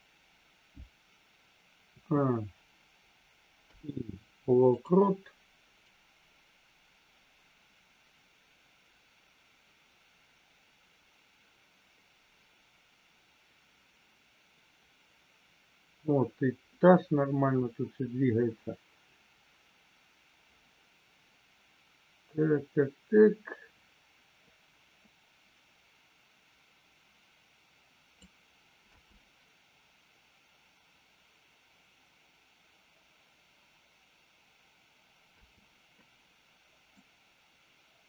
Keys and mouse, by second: 3.5 i, 5.9-28.1 drag, 28.9 space, 35.4 space, 36.9-38.0 drag.